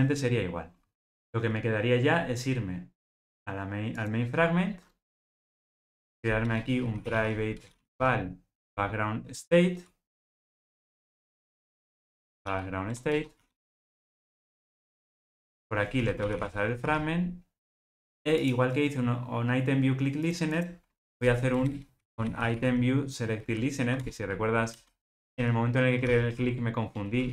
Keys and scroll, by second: 7.6 Return, 11.0 Return, 24.0 Return.